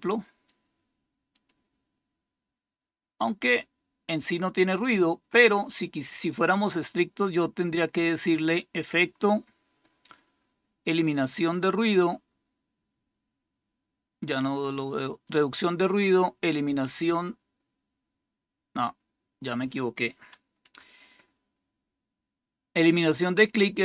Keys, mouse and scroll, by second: 1.2 click, 8.3 click, 16.7 click, 20.5 Escape, 22.9 click.